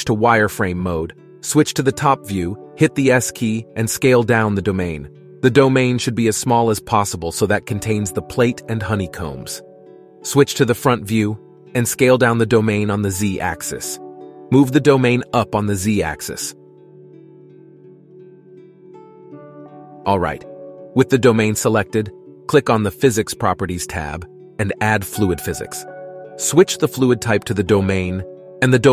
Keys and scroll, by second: 1.7 KP_7, 3.6 s, 10.1 KP_1, 11.6 s, 15.7 g.